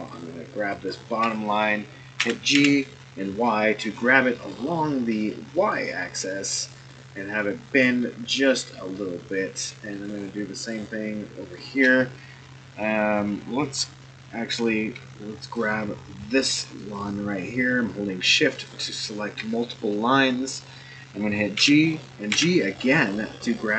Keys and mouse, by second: 0.0 shift+click, 0.9 shift+click, 2.2 g, 9.9 click, 10.7 shift+click, 11.5 shift+click, 16.8 shift+click, 21.5 g.